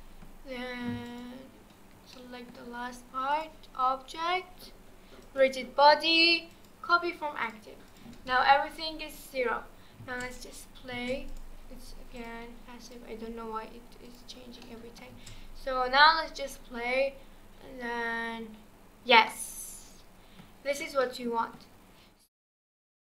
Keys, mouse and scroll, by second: 1.1 shift+click, 2.1-3.3 middle drag, 3.3-6.4 drag, 7.4 click, 7.9 click, 8.3-8.7 middle drag, 8.7 scroll down 2, 9.1 click, 9.6-10.0 scroll down 2, 10.0 space, 10.9 space, 11.3 click, 12.2-14.6 drag, 14.6-15.1 middle drag, 15.1 space, 19.3-22.0 middle drag, 22.0 scroll down 2.